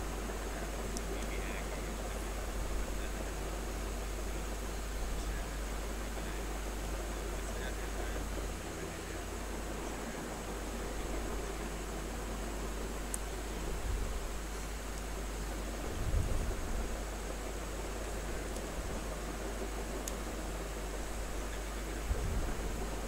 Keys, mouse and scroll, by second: 1.3 space, 1.5 ctrl+click, 2.0 click, 3.2 click, 4.4-6.8 drag, 6.8 space, 7.2 click, 7.3 space, 11.1 click, 12.2 click, 13.1 click, 14.2 click, 14.4 space, 14.8 alt+click, 16.1 click, 17.9 click, 18.5 r, 18.7 click, 19.7 b, 20.0 space, 20.3-22.5 ctrl+drag, 22.5-23.0 drag.